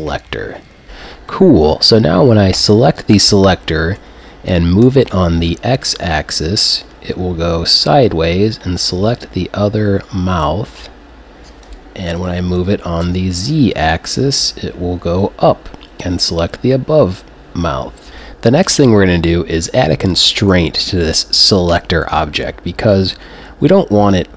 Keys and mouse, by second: 2.6 right click, 4.0 g, 11.8-14.3 drag, 12.1 g, 20.3 right click, 22.9 g.